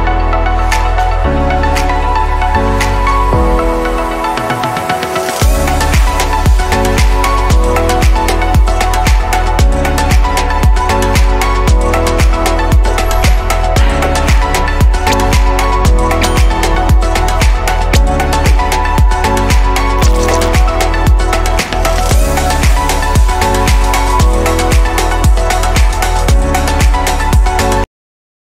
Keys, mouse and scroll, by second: 0.0-2.4 middle drag, 2.4 click, 3.2 click, 6.8-7.8 middle drag, 7.8-8.8 scroll down 4, 8.8-11.1 middle drag, 11.1 click, 11.6-12.2 scroll down 2, 12.2 scroll down 1, 12.2-12.9 shift+middle drag, 12.9-13.3 scroll down 1, 13.3-14.4 scroll up 1, 14.5-14.8 scroll up 1, 14.8-17.9 middle drag, 17.9 ctrl+s.